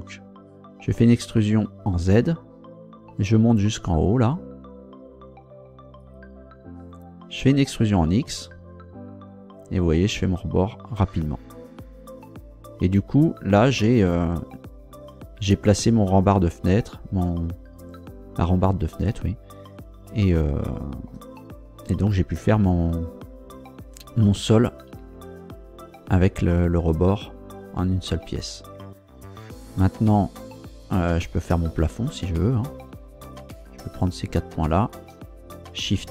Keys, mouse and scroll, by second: 0.9 e, 2.0 z, 6.0 click, 7.5 e, 8.2 x, 11.7 click, 13.7 scroll down 2, 20.3 shift+click, 25.0 Tab, 28.1 Tab, 32.2 right click, 33.2 shift+right click, 33.9 shift+right click, 34.8 shift+right click.